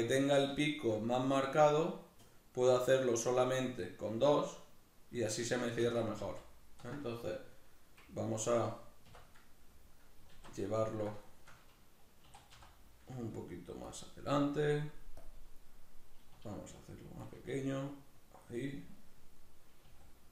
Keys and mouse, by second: 8.2 alt+right click, 8.8 \, 9.4-13.8 middle drag, 10.1 alt+q, 12.0 e, 13.8 click, 16.1 s, 18.1 click, 18.2-20.3 middle drag, 19.6 s.